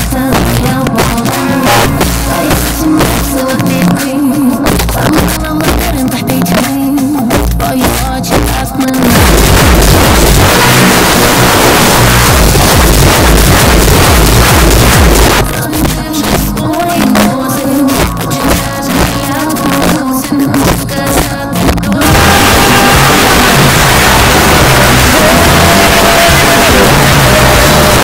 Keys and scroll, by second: 1.8 a, 1.9-3.0 Down, 3.1 Down, 3.3 Down, 3.5 Down, 3.6 Down, 3.8 Down, 4.2 Down, 4.3 Down, 4.5 Down, 4.8 Return, 15.3 Page_Down, 27.9 space.